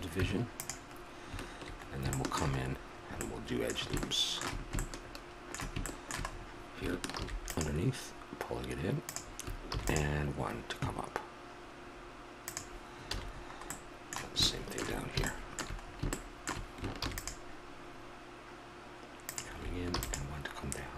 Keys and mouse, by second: 0.1 Tab, 2.1-3.3 middle drag, 7.2 ctrl+r, 13.1 a, 13.3-17.0 middle drag, 17.0 ctrl+r.